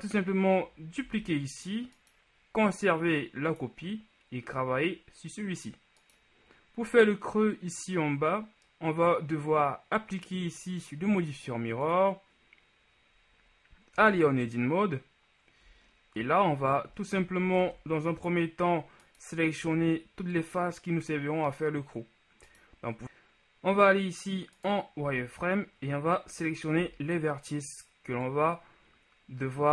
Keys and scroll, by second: 1.2 shift+d, 14.2 Tab, 17.8 ctrl+shift+Tab, 19.8 z, 23.0 ctrl+KP_1, 25.2 z, 26.9 b.